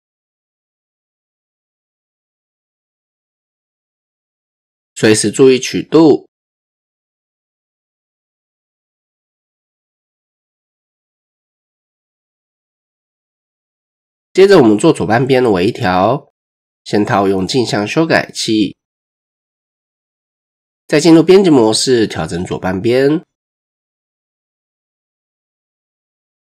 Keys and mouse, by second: 0.2 click, 1.7 click, 2.3 shift+drag, 4.1 click, 7.0 click, 7.7 shift+click, 9.3 drag, 10.5 click, 12.5-12.9 shift+drag, 16.0 click, 16.5 Tab, 18.4-19.2 drag, 19.9 Tab, 20.4 shift+click, 20.6 shift+middle click, 21.4 click, 23.1 shift+middle click, 24.1 click, 25.7 shift+click.